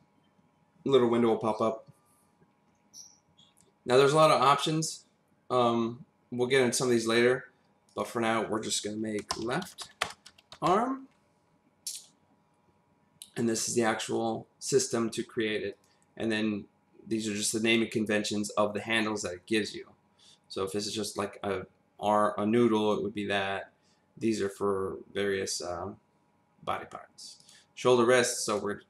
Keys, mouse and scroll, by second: 7.9 click, 9.3-10.7 typing, 15.7 click, 27.4 click, 28.4 click.